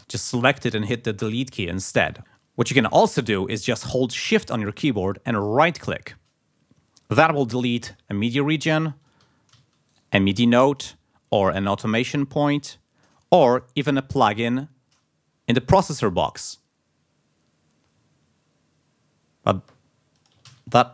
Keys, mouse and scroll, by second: 0.0 click, 1.2 Delete, 2.2 ctrl+z, 2.2 ctrl+click, 5.8 scroll up 1, 8.6-9.0 scroll up 1, 9.0 click, 9.9 shift+click, 12.5 shift+click, 14.4 shift+click, 20.2 click, 20.4 ctrl+scroll up 1.